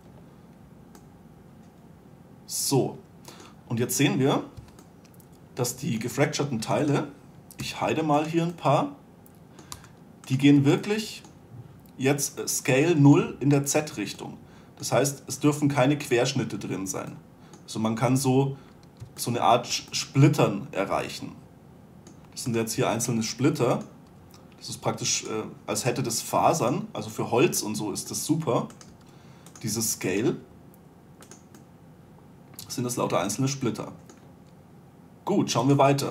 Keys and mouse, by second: 0.1 2, 3.1-3.5 middle drag, 5.1 a, 8.1 h, 10.2 h, 20.8-21.3 middle drag, 23.0-23.6 right drag, 23.6-24.5 middle drag, 24.6 g, 26.4 g, 27.7 click, 29.2-32.3 drag, 29.4 g, 30.8 g, 32.3-33.1 middle drag.